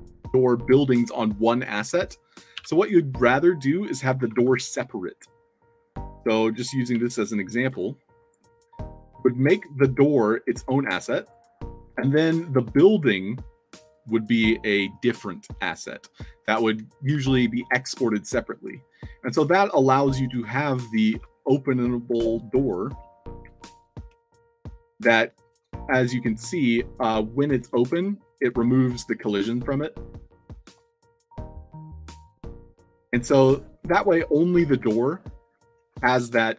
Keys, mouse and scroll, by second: 3.8-4.9 typing, 7.6 click, 8.4 i, 8.7 click, 9.0 o, 10.0-11.0 shift+drag, 11.1 click, 15.2-15.8 alt+drag, 17.1 w, 18.6 w, 21.1 Tab, 22.0-29.3 typing, 30.5-36.5 typing.